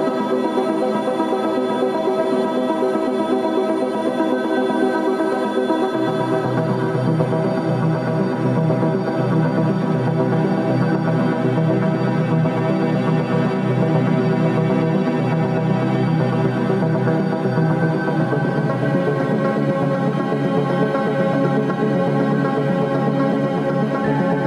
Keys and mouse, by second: 0.0 Tab, 0.0 ctrl+KP_Add, 0.1 ctrl+KP_Add, 1.2 middle click, 2.6 click, 3.5 ctrl+KP_Add, 3.9 a, 5.1-6.3 middle drag, 6.5-7.9 right drag, 8.6 Tab, 9.3 click, 11.4 alt+p, 13.7 KP_Enter, 19.2-20.3 drag, 21.7 click, 21.9-24.4 drag.